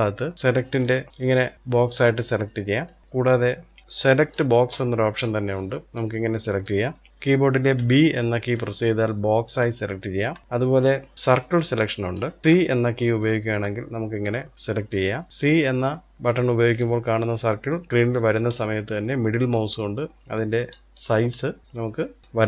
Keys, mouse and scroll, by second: 0.3 click, 2.6 click, 4.9 click, 6.3 click, 7.5 b, 10.6 click, 12.2 click, 12.4 c.